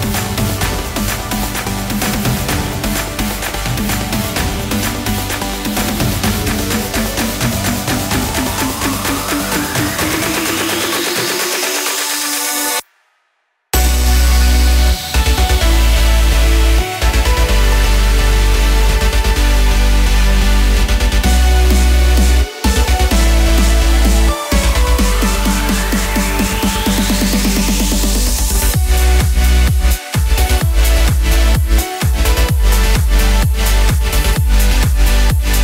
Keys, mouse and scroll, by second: 0.6 ctrl+z, 0.9 click, 2.6 click, 6.9 click, 10.2 right click, 12.2 right click, 13.9 click, 16.1 middle click, 17.1 scroll down 3, 17.5 middle click, 19.2 middle click, 20.8 middle click, 23.1 click, 23.4 middle click, 24.9 click, 25.4 click, 27.0 click, 27.0 shift+a, 27.7 click, 28.4 click, 30.4 click, 31.9 s, 33.6 middle click, 34.1 scroll down 2, 34.8 click, 35.5 click.